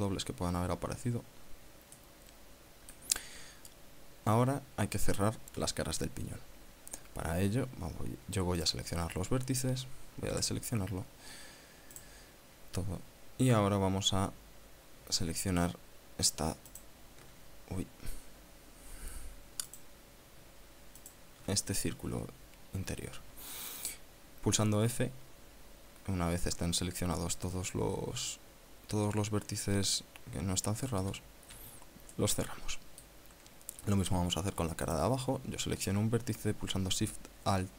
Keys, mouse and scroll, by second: 0.0 click, 2.7-3.8 middle drag, 6.9 scroll down 1, 7.2 scroll up 1, 9.3 click, 11.0 a, 12.6 right click, 17.3 alt+shift+right click, 18.8-19.1 scroll up 1, 19.4 scroll down 1, 20.3 right click, 21.7 alt+shift+right click, 22.4 scroll down 1, 31.7 f, 32.8-33.9 middle drag, 34.1 scroll up 1, 34.6 scroll down 1, 35.5 right click.